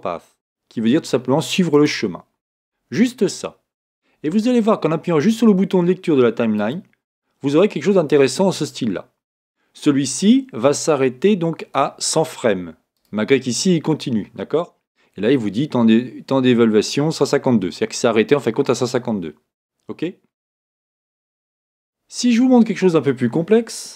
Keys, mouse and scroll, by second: 6.6 click, 12.9-16.0 drag.